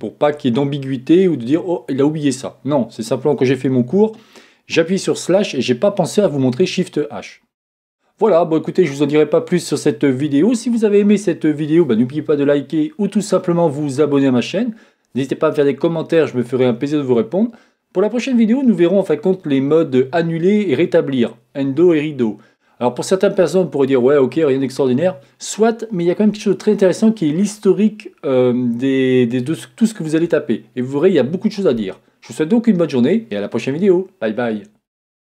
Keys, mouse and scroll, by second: 7.6 scroll down 2, 7.7-35.2 middle drag.